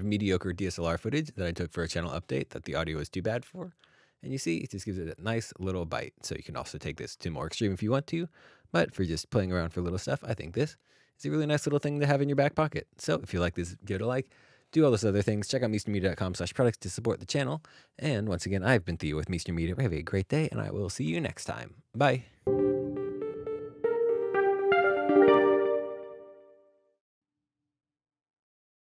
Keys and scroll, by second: 3.4 alt+d, 3.8 alt+d.